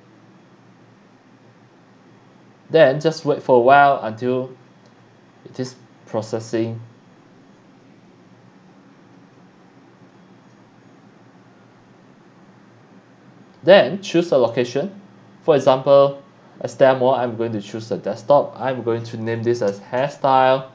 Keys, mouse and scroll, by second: 15.6 click, 18.6 click, 19.5-20.7 typing.